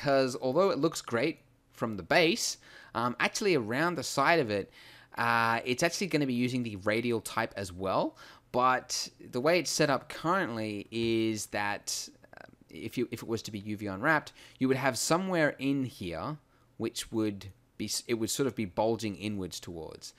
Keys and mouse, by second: 11.1-13.7 middle drag, 15.4 middle click.